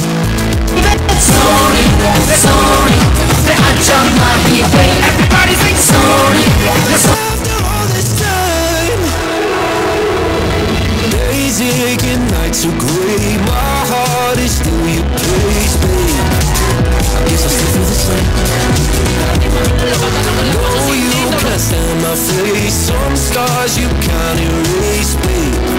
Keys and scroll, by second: 7.2 Page_Down.